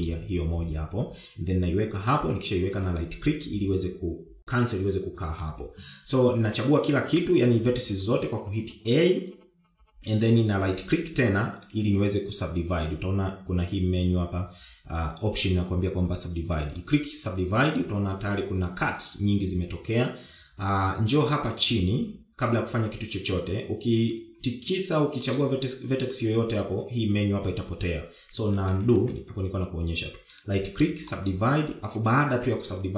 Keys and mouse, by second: 7.3 a, 11.0-28.6 right drag, 28.8 ctrl+z, 29.2 ctrl+z.